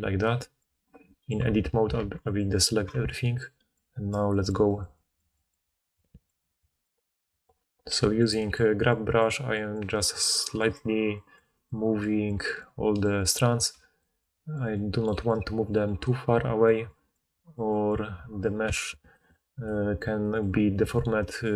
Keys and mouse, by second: 1.4 Tab, 1.9 alt+a, 2.9 Tab, 7.9 f, 8.2 click, 13.8 f, 14.1 click.